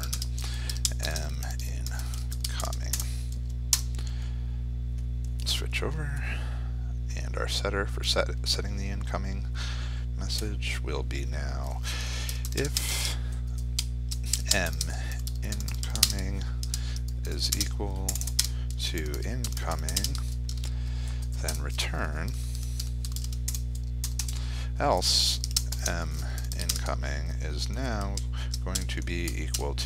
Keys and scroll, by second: 6.1 F4, 15.8 ctrl+space, 19.7 ctrl+space, 26.5 ctrl+space.